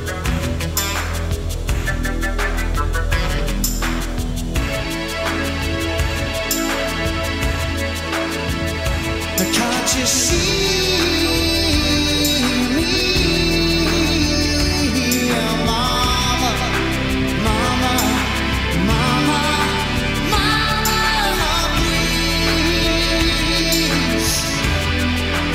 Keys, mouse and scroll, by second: 0.5 g, 5.4 s, 8.3 g, 14.5 click, 15.4 shift+a, 19.6-25.5 drag.